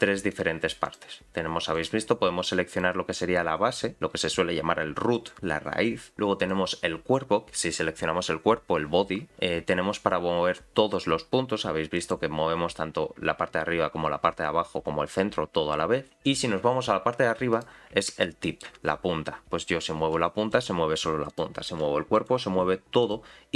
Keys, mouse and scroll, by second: 0.3 click, 0.8 click, 1.7 click, 2.7 click, 3.3 g, 6.4 click, 9.3 g, 12.4-14.3 scroll down 1, 17.5 click, 18.2 shift+middle click, 20.0 g, 21.3 click, 21.7 g, 23.0 click.